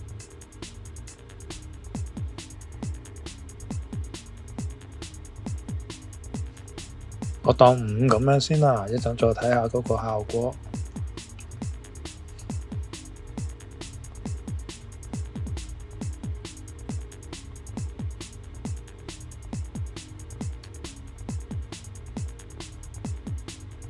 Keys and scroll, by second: 8.8 Return.